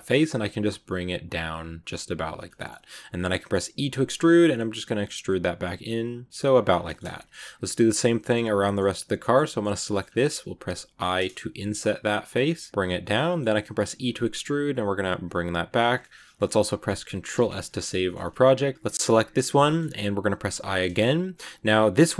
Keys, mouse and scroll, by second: 2.3-3.6 middle drag, 3.6 e, 6.6 scroll down 2, 6.7-8.9 middle drag, 8.9 right click, 9.1 shift+middle click, 9.6-10.7 scroll up 3, 9.7 middle click, 10.8 i, 13.1 middle click, 13.8 e, 15.9 scroll down 2, 16.0-17.3 middle drag, 17.3 ctrl+s, 17.6 middle click, 17.9 scroll up 1, 17.9 shift+middle click, 18.9 right click, 19.5 middle click, 19.7-20.3 scroll up 1, 20.4 i.